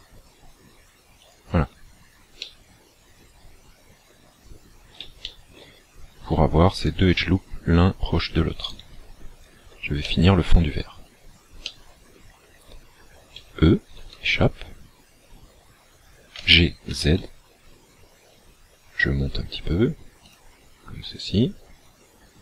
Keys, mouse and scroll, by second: 1.3 shift+click, 2.4 middle click, 4.4-5.2 scroll up 3, 5.2 shift+middle click, 6.8 alt+shift+right click, 8.6 alt+right click, 10.0 shift+middle click, 11.1-11.5 scroll down 3, 11.6 middle click, 13.4 e, 16.4 g, 20.4 shift+click.